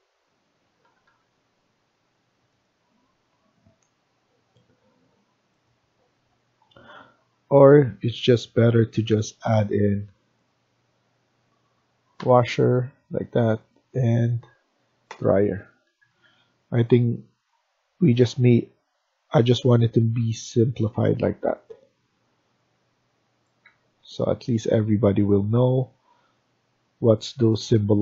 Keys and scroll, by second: 0.7 Escape, 0.9 Escape, 6.0 F1, 12.0 w, 15.0 d, 15.8 Escape, 16.0 Escape, 16.8 Escape, 20.9 Escape, 22.9 Escape, 23.6 Escape.